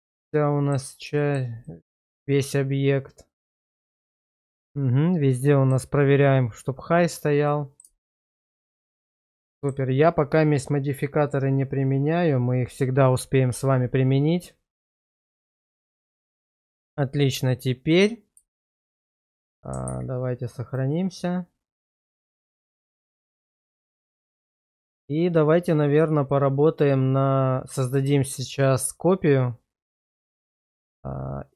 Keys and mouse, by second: 1.2 shift+middle click, 1.6-5.7 middle drag, 7.5 middle click, 8.0 shift+middle click, 9.3 middle click, 15.8 middle click, 18.5 shift+middle click, 19.8 ctrl+s, 22.3-24.9 middle drag, 26.3-27.7 middle drag, 27.9 shift+middle click, 28.6-31.5 middle drag.